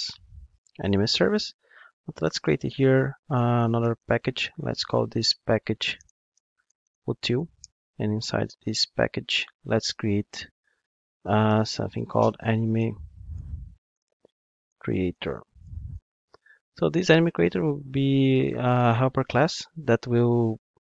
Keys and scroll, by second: 0.0 Down, 0.2 Right, 2.5 super+n, 8.7 super+n.